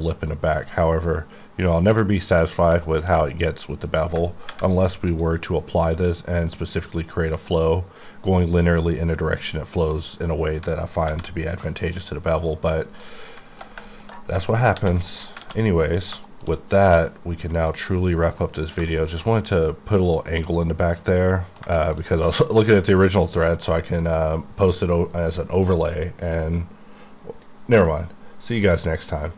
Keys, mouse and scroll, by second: 0.2-2.5 scroll up 8, 2.8 shift+middle click, 3.2 scroll up 1, 4.5 alt+v, 5.1 click, 5.2 click, 10.7 alt+Num_Lock, 11.1 v, 11.6 click, 12.2-13.0 scroll down 7, 12.5 middle click, 13.0 middle click, 13.3 middle click, 13.7 shift+middle click, 14.1 middle click, 14.3 alt+middle click, 14.7 alt+h, 15.0 middle click, 15.4 alt+a, 15.6 alt+scroll down 1, 15.8 alt+middle click, 16.3 shift+middle click, 16.5 shift+double middle click, 17.7 double middle click, 17.8 click, 18.5 middle click, 19.2 middle click.